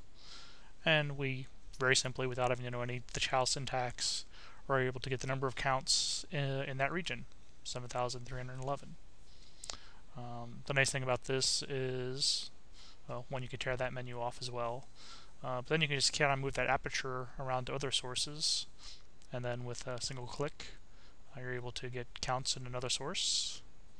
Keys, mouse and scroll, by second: 0.0 click, 1.9 click, 3.0 click, 4.0-5.5 drag, 6.3 click, 7.7 click, 9.4-10.9 drag, 11.3 click, 12.3 click, 13.2-14.6 drag, 15.8-18.1 drag, 19.1 click, 21.3-23.9 drag.